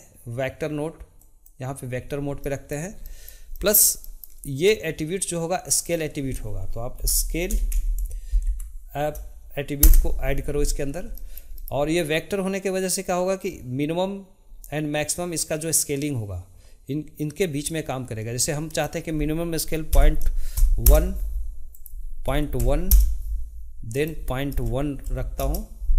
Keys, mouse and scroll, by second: 2.4-5.6 shift+middle drag, 5.6-8.8 drag, 11.1-14.7 shift+middle drag, 18.7-25.9 drag.